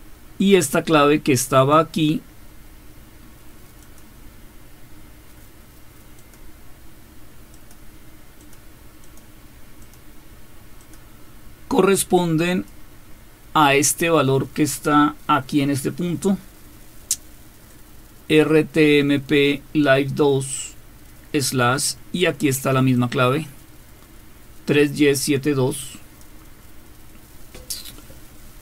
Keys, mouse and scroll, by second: 0.9-1.6 scroll up 1, 1.6 click, 6.2 click, 7.5 click, 8.4 click, 9.0 click, 9.8 click, 10.9 click, 12.5 click, 17.7-21.5 drag, 22.9-26.2 drag.